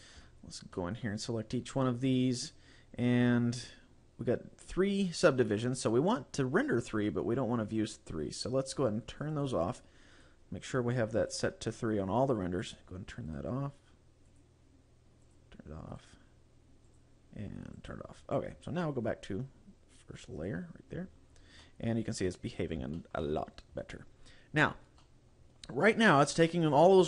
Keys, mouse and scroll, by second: 0.3-0.6 scroll up 2, 0.8 middle click, 2.1 click, 6.9 click, 9.4 click, 10.2 right click, 11.2 click, 12.6 click, 13.3 right click, 14.3 click, 15.3 click, 16.0 right click, 16.9 click, 17.8 click, 18.2-19.0 scroll down 3, 20.4 click, 21.0-21.7 scroll down 5, 21.7 middle click, 23.0 shift+middle click, 23.5 scroll up 1, 23.8-24.6 scroll down 2, 24.6 scroll down 1, 25.1 middle click, 26.8 scroll up 2.